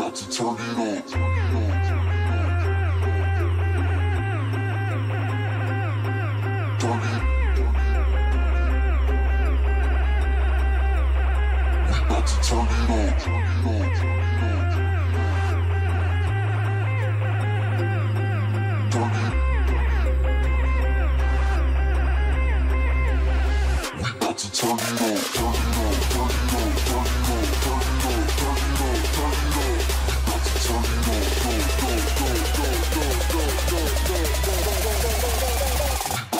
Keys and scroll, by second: 3.7 ctrl+space, 4.7 ctrl+space, 35.9 ctrl+space.